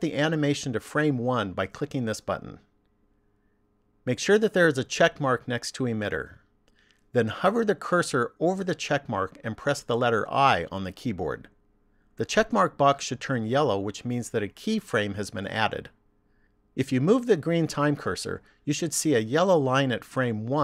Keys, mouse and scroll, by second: 1.8 click, 10.4 i, 18.1 click.